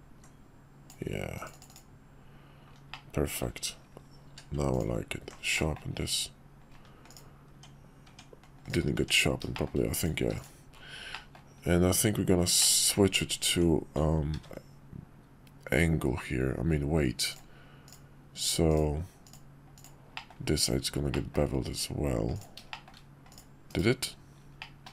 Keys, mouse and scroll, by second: 2.9-3.5 middle drag, 4.3 q, 5.5 drag, 7.1 click, 7.6 Tab, 9.5 shift+click, 10.0 click, 10.2 q, 11.1 middle click, 12.6 click, 13.5 Tab, 14.3 ctrl+`, 20.1 middle click, 21.1 middle click, 22.3 click, 22.7 shift+middle click, 23.3 click, 24.6 middle drag.